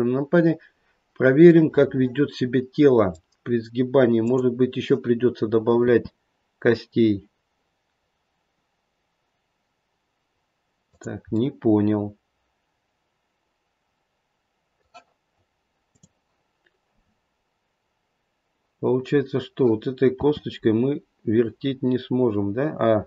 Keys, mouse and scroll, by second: 1.6 middle click, 1.8 middle click, 4.1 middle click, 4.1 click, 5.8 r, 11.3 middle click, 13.8 middle click, 20.1 r.